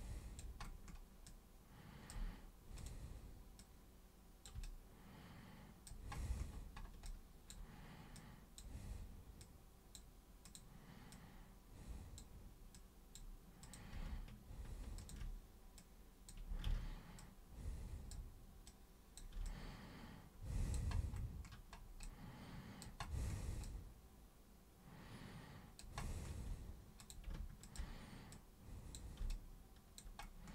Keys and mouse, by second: 1.2 alt+super+click, 2.8 super+click, 3.6-4.5 super+drag, 4.6-5.9 alt+super+drag, 7.1 alt+super+click, 8.2 super+click, 9.4 super+click, 10.5 super+click, 11.1-12.2 super+drag, 12.8 super+click, 13.7 super+click, 15.0 ctrl+shift+super+click, 15.8-16.3 super+drag, 16.7 ctrl+super+z, 17.2-18.1 super+drag, 18.7 super+click, 19.4-20.8 alt+super+drag, 22.1 alt+super+click, 23.6-25.8 alt+super+drag, 27.0 super+click, 27.6 ctrl+shift+super+click, 28.4 super+click, 29.3 alt+super+click.